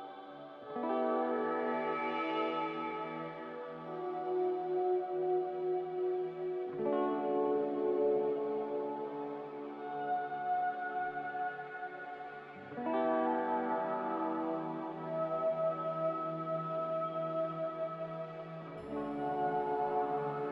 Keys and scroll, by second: 0.1 ctrl+c, 3.3 ctrl+v, 3.6-4.3 typing, 6.1-7.4 typing, 19.3 z.